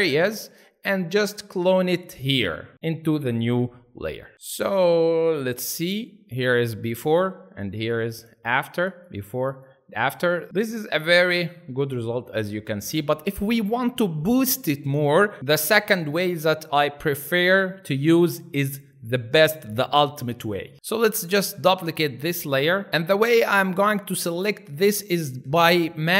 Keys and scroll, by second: 3.9 Escape, 4.3 ctrl+alt+space, 5.0 ctrl+alt+space, 10.5 alt+space.